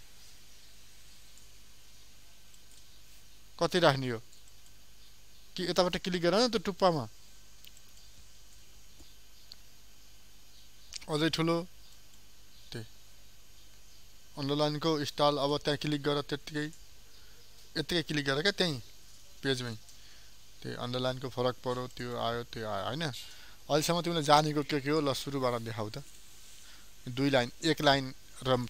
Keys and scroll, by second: 26.0 ctrl+a.